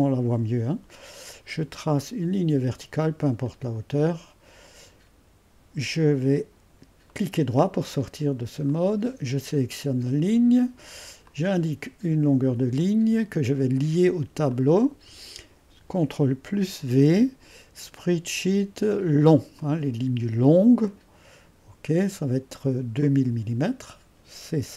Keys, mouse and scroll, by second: 3.4-6.6 drag, 7.1-8.3 right drag, 8.7-10.3 drag, 11.2-14.4 drag, 14.5-15.7 drag, 16.5 ctrl+v, 19.6-24.7 drag.